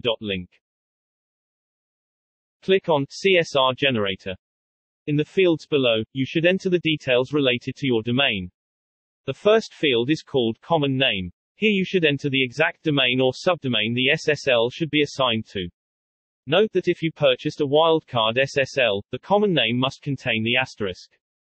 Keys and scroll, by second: 0.0-1.9 typing, 10.8-13.7 typing.